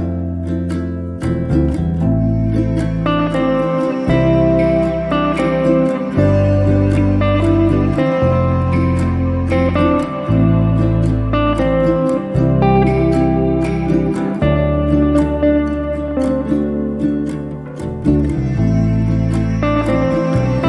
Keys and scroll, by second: 1.6 t, 3.7 0, 4.1 Return, 6.7 r, 8.8 space, 12.7 p, 13.7 0, 14.3 Return, 19.0 t.